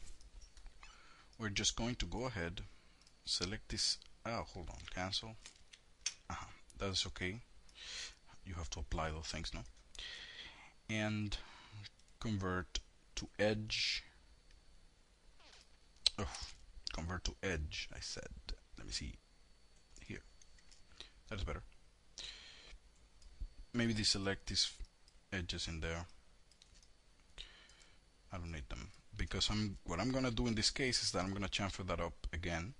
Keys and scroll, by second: 4.7 ctrl+z.